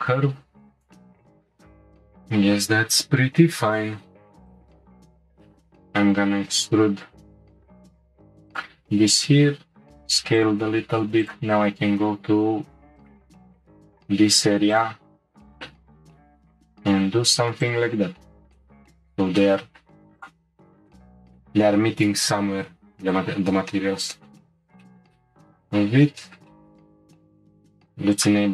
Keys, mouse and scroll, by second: 0.3 g, 1.3-4.0 scroll up 1, 4.5 alt+click, 5.3 e, 9.2 s, 11.0 Tab, 11.2 click, 11.6 Tab, 12.6 ctrl+r, 15.4 alt+click, 16.0 s, 17.9 Tab, 18.2-18.6 scroll down 1, 18.6-19.0 shift+middle drag, 19.0 click, 19.4-20.2 middle drag, 20.2 click, 20.5-23.0 shift+middle drag, 23.0-23.7 scroll down 1, 23.7-24.4 middle drag, 24.4 scroll up 1, 24.5-24.8 scroll down 1, 24.8-25.9 shift+middle drag, 25.9 scroll down 1, 26.2-27.0 shift+middle drag, 27.0 click, 28.1 click.